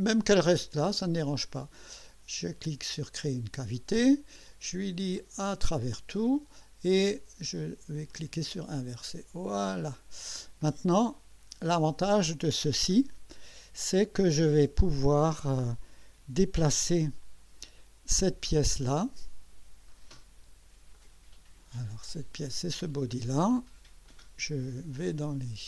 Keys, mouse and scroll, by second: 3.0 click, 5.2 click, 5.8 click, 8.1 click, 9.9 click, 10.6-12.8 drag, 13.0 scroll down 1, 18.9-19.8 drag, 21.0 click, 22.3 click, 24.1 click, 24.6 click.